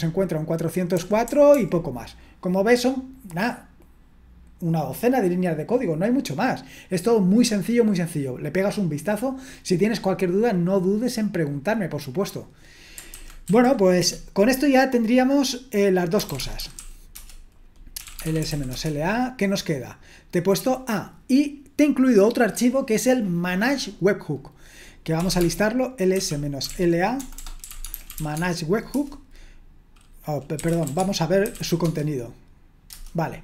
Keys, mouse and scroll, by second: 0.9-1.5 typing, 13.2-13.9 typing, 14.0 Return, 15.9-19.0 typing, 24.9-28.9 typing, 30.3-32.9 typing, 32.9 Return.